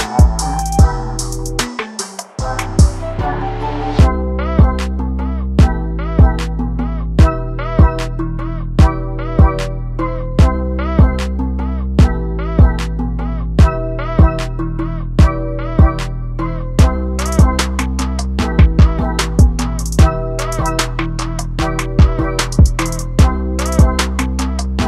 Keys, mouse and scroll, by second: 0.2 n, 0.8 click, 1.5 click, 2.4 middle click, 3.0 click, 3.6 click, 4.3 middle click, 5.2-5.6 scroll down 1, 5.6 Tab, 6.0 alt+a, 6.3 click, 6.5 right click, 7.3 alt+a, 7.6-7.9 middle drag, 7.9 click, 8.1 scroll up 2, 9.1 click, 10.3-17.4 drag, 17.8-18.2 scroll down 2, 18.2-18.7 scroll up 3, 18.7 alt+a, 19.0-19.4 scroll down 1, 19.8 click, 20.1-21.7 scroll down 12, 21.8 shift+middle click, 22.2-22.6 scroll up 4, 22.6-23.6 middle drag, 23.6 shift+right click, 24.6 shift+s.